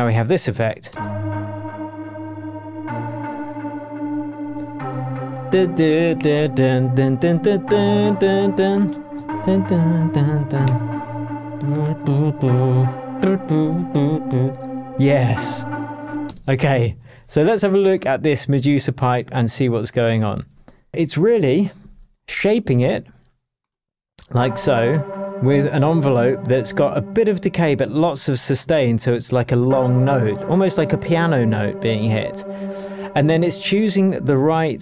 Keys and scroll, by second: 0.6 shift+Tab, 0.9 shift+space, 1.7 space, 9.2 shift+super+d, 10.0 super+d, 16.2 space, 16.8 super+s.